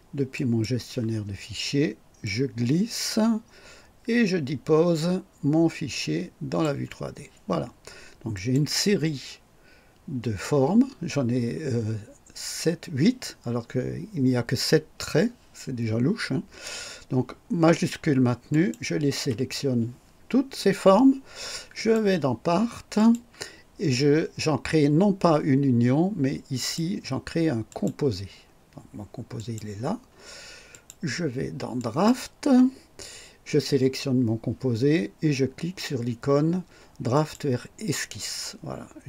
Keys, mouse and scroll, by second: 0.3 click, 2.2-6.8 drag, 8.3 click, 18.5 shift+click, 21.7 click, 22.9 click, 26.5 click, 27.6 click, 29.3 click, 30.7 click, 31.7 click, 37.1 click.